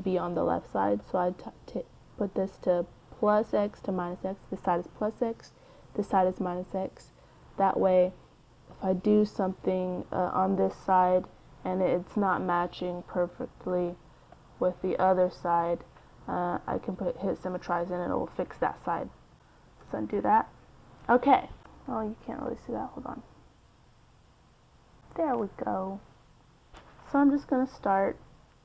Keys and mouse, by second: 1.2-3.4 drag, 8.6-10.3 drag, 11.0-12.6 drag, 12.7-16.0 drag, 16.4-18.3 drag, 19.0 ctrl+z, 19.4 ctrl+z, 19.7 ctrl+z, 20.0 ctrl+z, 20.8 middle click, 26.4 middle click, 27.1 KP_1.